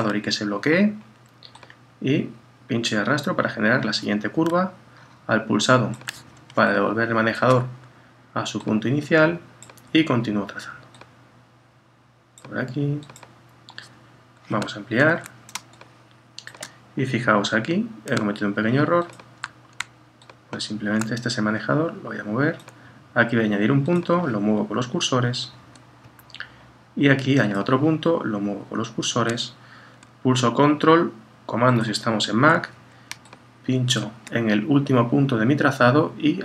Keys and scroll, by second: 15.0 super++, 24.8 Right, 28.4 Right.